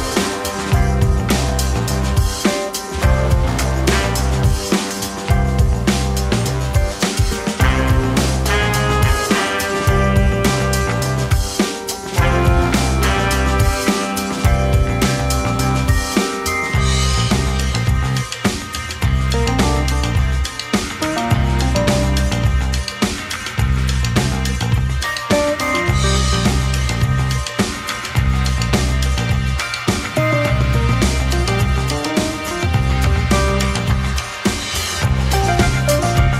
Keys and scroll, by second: 0.4 3, 12.1 ctrl+k, 13.0 ctrl+2, 19.6 z, 35.8 space.